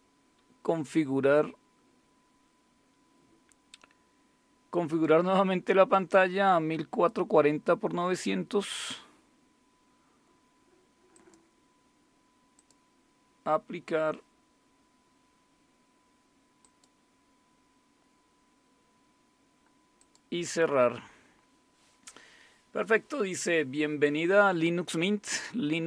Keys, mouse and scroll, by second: 4.9 click, 6.8-7.5 scroll down 1, 7.6-9.2 scroll down 1, 11.1 click, 12.6 click, 16.6 click, 20.0 click.